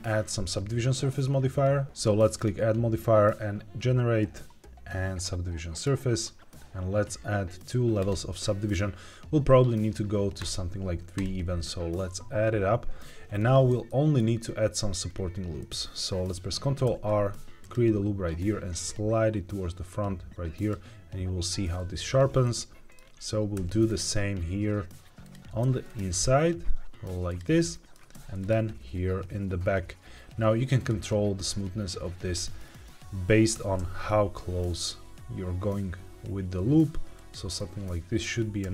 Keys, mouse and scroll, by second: 2.3-5.8 drag, 7.9 click, 10.3 click, 11.1 click, 13.3 shift+middle click, 13.8 middle click, 15.0-15.5 scroll up 2, 15.5 middle click, 16.8 ctrl+r, 20.5 click, 22.4 middle click, 23.5 ctrl+r, 25.1 click, 25.5 ctrl+r, 27.2 click, 27.5 middle click, 28.0 ctrl+r, 30.7 click, 33.4 g, 33.7 x, 37.1 click, 37.5 middle click, 38.5 ctrl+r.